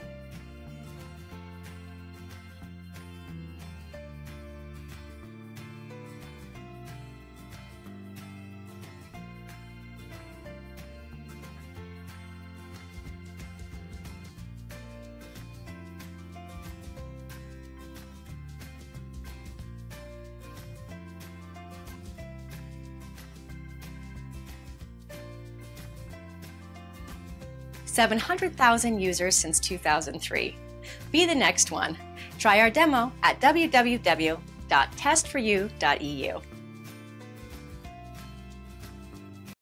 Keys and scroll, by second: 14.4 Return, 20.9 Return, 38.4 typing.